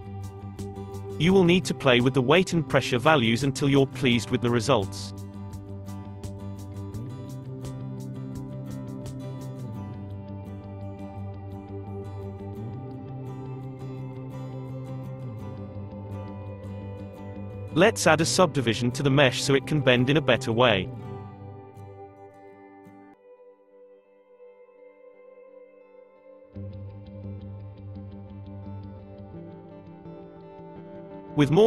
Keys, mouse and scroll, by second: 1.3 space, 2.1-3.7 scroll down 12, 3.7-6.9 drag, 6.9 space, 9.1 space, 9.8-12.9 middle drag, 14.2-15.5 scroll up 6, 15.5-15.9 scroll down 1, 15.9-16.8 middle drag, 16.8 Tab, 17.5-17.9 scroll down 3, 17.9-20.0 shift+middle drag, 20.0-22.4 drag, 22.4 a, 23.9 a, 25.6-26.9 right drag, 26.9 middle click, 27.5 Tab, 28.1-28.8 middle drag, 28.8 scroll down 1, 28.9-30.0 shift+middle drag, 30.0 space, 31.1-31.6 shift+middle drag.